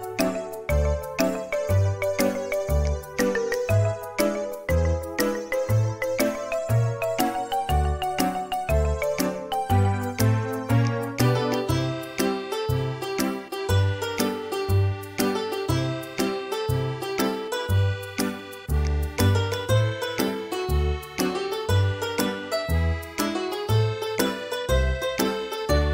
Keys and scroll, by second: 3.7 e, 10.4 space, 12.8 Delete, 18.9 Escape, 20.4 e, 21.4 space.